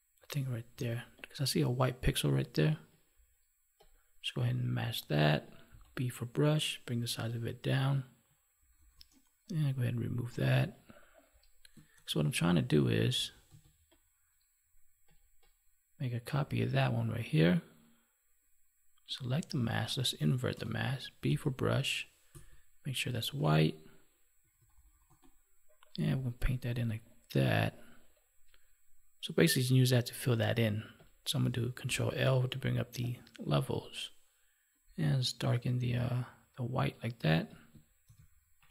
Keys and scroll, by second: 11.9 ctrl+1, 20.4 ctrl+i, 31.8 ctrl+l, 38.0 ctrl+s.